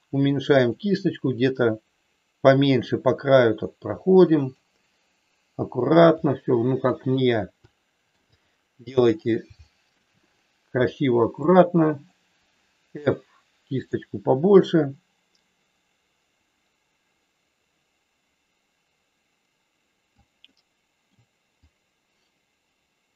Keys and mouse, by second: 1.5-4.6 drag, 6.3 click, 7.6 shift+middle click, 9.6 shift+middle click, 11.4 click, 12.9 f, 14.5-20.1 drag, 20.4 middle click, 21.6-23.1 drag.